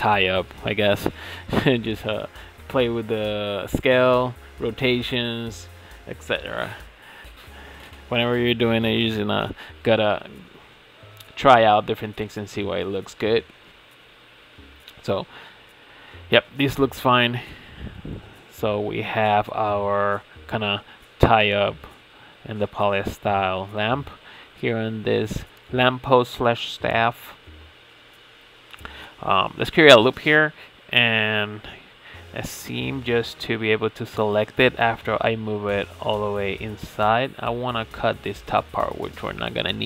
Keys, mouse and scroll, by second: 1.2 s, 3.1 shift+d, 4.6 s, 5.6 shift+d, 6.8 s, 8.3 r, 9.6 click, 9.9 l, 10.5 r, 11.5 g, 13.3 click, 13.8 l, 14.5 click, 15.2 l, 15.8 r, 17.2 s, 17.8 s, 19.2 click, 19.6 Tab, 19.7 click, 20.3 scroll down 2, 20.6-21.4 middle drag, 21.4 Tab, 22.2 click, 22.6 l, 23.2-25.8 shift+middle drag, 25.8 click, 26.2-26.6 scroll up 4, 26.6-29.1 shift+middle drag, 29.1 click, 29.6 ctrl+r, 31.0 ctrl+e, 32.5 click, 33.0 l, 34.0 click, 34.3 2, 34.7 alt+click, 35.4 g, 37.5-38.3 shift+middle drag, 38.3-38.8 scroll up 4, 38.8 scroll down 2.